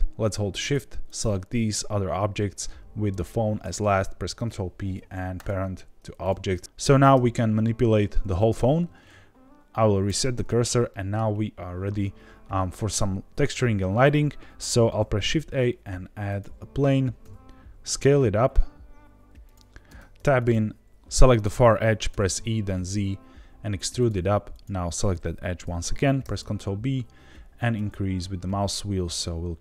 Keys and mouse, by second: 0.6 shift+click, 1.0 shift+click, 4.2 ctrl+p, 6.2 click, 6.5 click, 7.1 g, 7.7 Escape, 9.0 shift+s, 10.8 middle click, 14.9 shift+a, 17.2 s, 19.4 click, 19.8 Tab, 20.1 2, 20.4 click, 20.9 ctrl+z, 21.4 click, 22.0 e, 22.3 z, 23.9 click, 24.5 click, 26.2 ctrl+b.